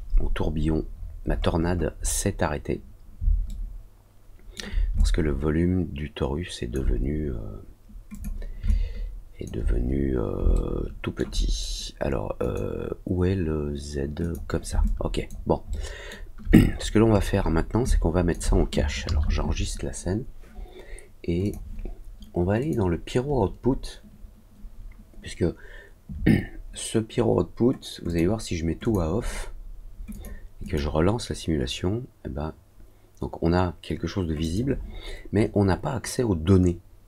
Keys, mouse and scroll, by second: 0.4-0.9 scroll down 2, 0.9 scroll up 1, 1.2-2.2 scroll down 3, 3.4-4.5 alt+middle drag, 4.9-6.7 alt+drag, 8.0 click, 8.6 alt+click, 10.5 alt+middle click, 12.3 click, 14.1 click, 14.8 alt+click, 15.6 alt+middle click, 16.6 middle click, 17.0 middle click, 17.3 middle click, 17.8 alt+click, 21.4 click, 22.5 click, 28.0 click, 28.8 click, 30.0 click, 30.6 click, 34.3 click.